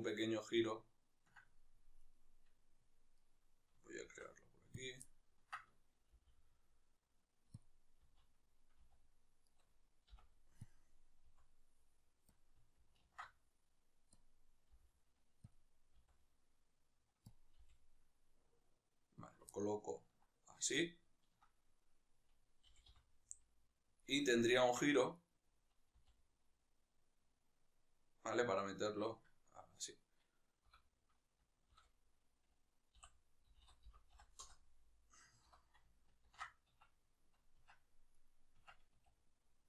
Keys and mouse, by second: 2.0-4.0 right drag, 4.0 shift+d, 4.9 click, 5.1-7.7 ctrl+middle drag, 6.1 g, 7.7 click, 8.1 z, 9.6 right click, 10.7 ., 11.2 s, 12.4 click, 13.0 ctrl+alt+s, 14.2 click, 14.8 g, 15.6 click, 16.0 s, 17.4 click, 17.6 g, 19.6-21.8 ctrl+middle drag, 21.8 right click, 22.8 g, 24.8 Tab, 25.2 right click, 26.0 r, 29.0 right click, 37.7 Tab, 38.1-38.7 right drag, 38.7 Tab, 38.9 a.